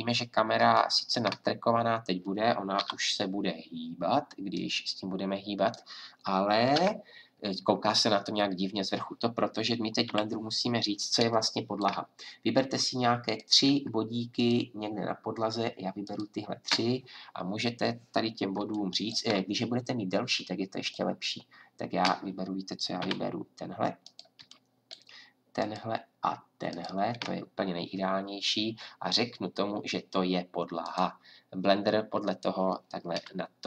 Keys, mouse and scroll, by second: 2.7 KP_7, 6.7 KP_0, 10.0 a, 13.2-15.2 drag, 20.8-22.5 drag, 22.5 middle click, 23.0 a, 24.0-26.2 drag.